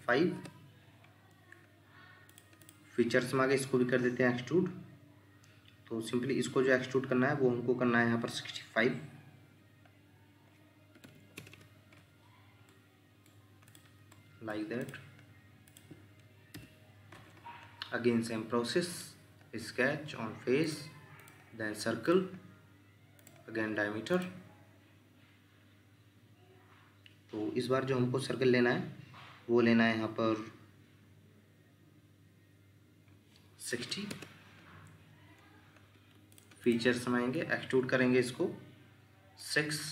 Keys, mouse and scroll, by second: 0.0-0.3 typing, 0.4 Return, 2.6 double click, 10.9-11.3 typing, 11.4 Return, 11.5 Return, 12.7 middle click, 16.2 middle click, 33.7-34.1 typing, 34.1 Return, 35.9 Escape, 36.6 double click.